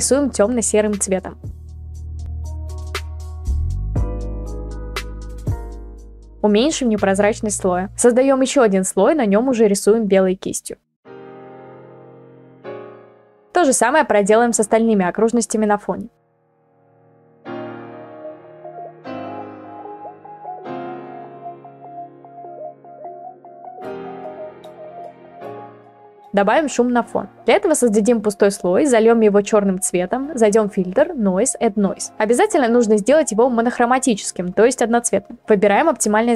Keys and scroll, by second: 1.6 ctrl+z, 9.9 ctrl+z, 10.6 ctrl+z, 11.0 [, 11.1 [, 16.6 b, 17.2 ctrl+z, 18.0 ctrl+z, 18.4 ], 18.4 ], 18.6 ctrl+z, 18.9 ctrl+z, 21.2 ctrl+z.